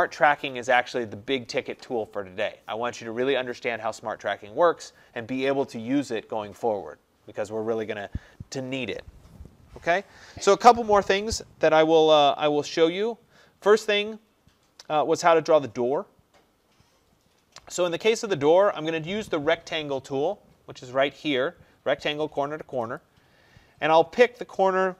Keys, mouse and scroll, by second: 12.9 middle click, 13.4-14.1 scroll, 14.1-16.4 scroll, 16.4-20.1 scroll, 23.1 click.